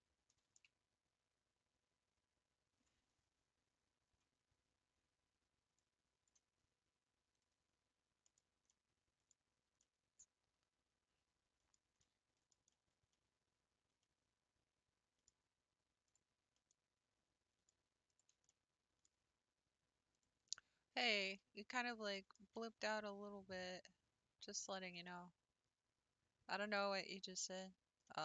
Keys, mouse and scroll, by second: 7.4 click, 8.2 middle click, 8.4 scroll down 1, 8.7 middle click, 9.3-9.8 scroll down 2, 9.8-11.7 middle drag, 11.7 scroll down 3, 12.0-16.1 middle drag, 16.1 click, 16.5-18.2 middle drag, 18.2 shift+Left, 18.5-20.2 middle drag, 20.2 click, 20.6-21.3 scroll up 3, 21.5 middle click, 22.4 s, 24.9-27.7 middle drag, 27.7-28.0 scroll down 2, 28.0-28.2 middle drag.